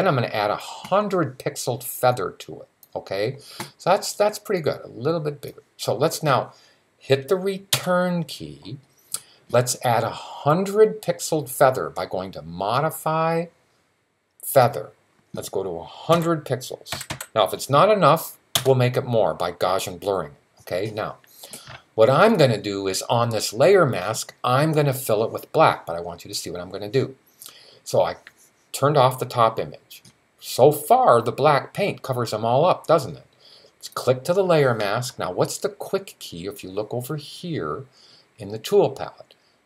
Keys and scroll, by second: 15.9-16.9 typing.